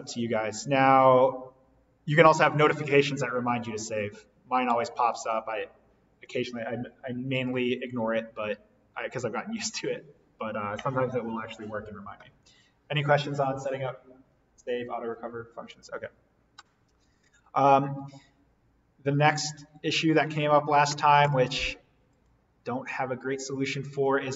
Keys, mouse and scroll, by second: 17.0 click, 20.0 click, 23.1 scroll.